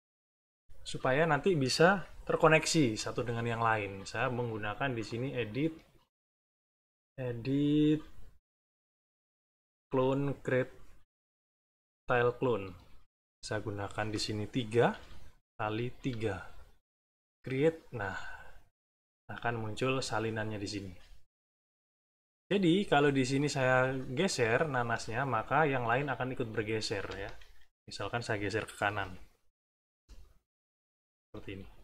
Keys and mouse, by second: 3.9 middle click, 5.0 click, 11.9 click, 13.8 click, 14.9 3, 15.5 click, 15.9 3, 17.1 click, 18.2 middle click, 21.8 click, 23.3 click, 24.2 click, 28.8 Right, 29.6 Right, 30.6 click, 31.5 Right.